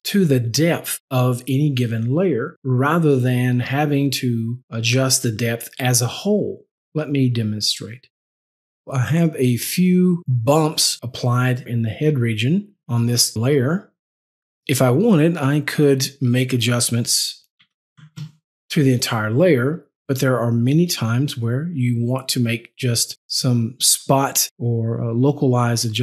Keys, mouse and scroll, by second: 12.8 click, 13.4 click, 16.4 click, 17.7 KP_5, 17.9 KP_0, 18.1 KP_Enter.